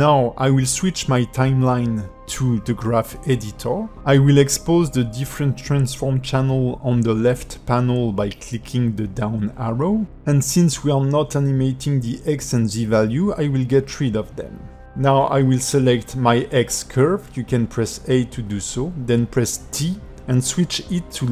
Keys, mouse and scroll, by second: 0.0 click, 2.7 click, 3.9 shift+middle click, 4.7 a, 4.9 KP_Decimal, 5.7 shift+middle click, 6.7 click, 7.7 ctrl+middle click, 9.0 click, 10.3 click, 11.4 click, 12.1 click, 14.6 x, 14.8 click, 15.0 x, 15.4 click, 16.4 click, 17.3 shift+click, 18.0 click.